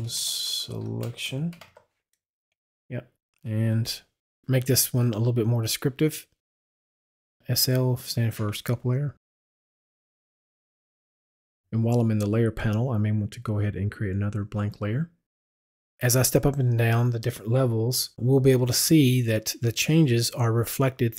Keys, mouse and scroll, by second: 0.0-1.6 typing, 2.4 Return, 4.2 Return, 5.0 Left, 5.9 click, 7.4 click, 7.6 shift+s, 8.2 shift+space, 8.6 click, 13.8 click, 18.1 w.